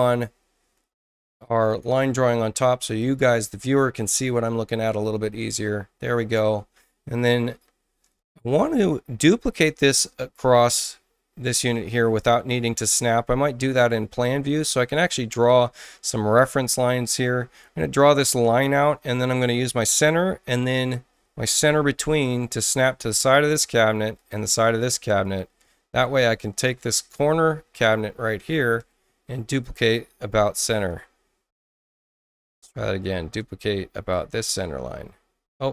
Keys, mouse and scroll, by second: 1.6 click, 2.8 click, 6.1 space, 7.1 click, 13.2 Tab, 17.5 click, 18.6 click, 19.7 i, 20.8 ctrl+i, 22.6 click, 24.1 click, 25.2 click, 25.7 space, 26.1 click, 27.1 click, 27.7 click, 28.4 ctrl+alt+c, 29.4 click, 32.2 click, 32.9 Return, 34.1 click.